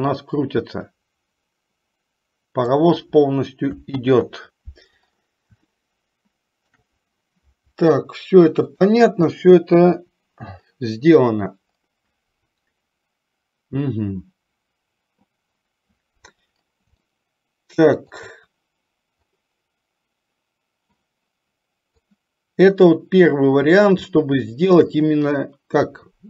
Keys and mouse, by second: 4.2 ctrl+z, 5.9-7.0 shift+middle drag, 8.8 click, 10.1 Delete, 17.3-18.6 shift+middle drag, 22.3-23.7 drag, 24.4-25.0 shift+middle drag.